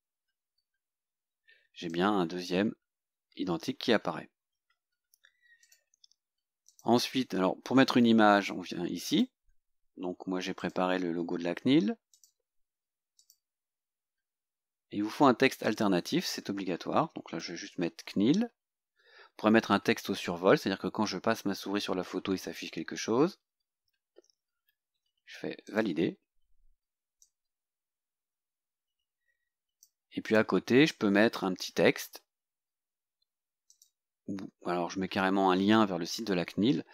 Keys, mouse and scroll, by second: 0.6 scroll down 2, 2.0-2.7 drag, 4.7 Delete, 5.7 click, 6.8 click, 9.1 click, 10.7 click, 12.2 click, 13.3 click, 15.7 click, 16.8-18.4 typing, 18.9-19.2 scroll down 2, 24.4-24.7 scroll down 2, 25.7 click, 27.3-30.1 drag, 30.3 click, 33.8 click.